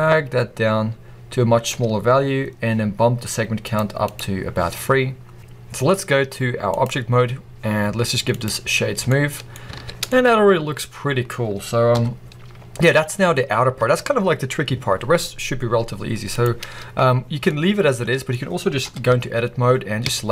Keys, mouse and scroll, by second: 4.9-5.4 scroll down 2, 5.4-6.6 middle drag, 6.6-9.0 drag, 8.8 scroll down 2, 9.0-16.2 middle drag, 9.6 alt+a, 9.8 scroll down 2, 11.8 KP_1, 12.4 scroll up 2, 16.2 click, 16.5-17.1 scroll down 1, 17.1 scroll up 1, 17.4-19.0 middle drag, 18.7 KP_1, 19.0 Tab, 19.4-19.9 scroll up 1, 19.9 a.